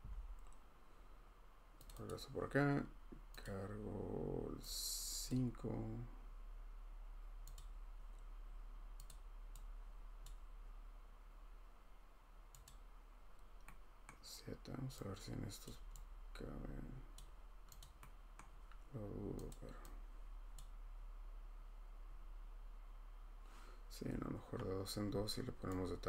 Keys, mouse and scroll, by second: 1.8 click, 2.1 click, 3.4 click, 5.3 click, 7.5 click, 9.1 click, 10.2 click, 14.0 scroll, 15.6 click, 17.1 click, 17.8 click, 18.4 scroll, 19.5 click, 20.6 click, 25.0 Escape.